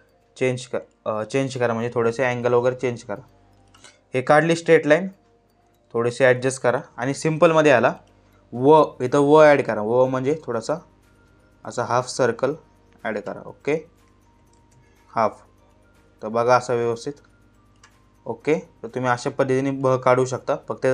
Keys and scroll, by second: 5.5 Up, 14.2 ctrl+z.